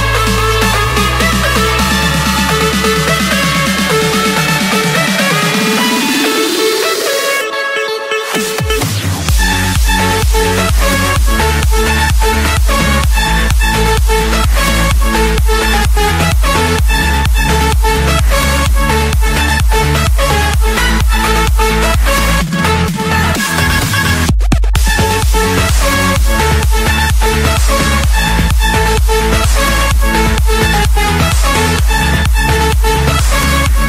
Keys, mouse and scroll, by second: 1.3-2.6 typing, 3.5 Return, 9.8-10.3 typing, 12.1 8, 13.1 Return, 13.8 Escape, 16.4 right click, 17.8 click, 21.7-22.5 drag, 22.6 middle click, 22.9 Escape, 24.0 click, 25.9 click, 26.3 Escape, 26.9 click, 27.4 right click, 29.3-30.4 drag, 31.9-33.1 drag.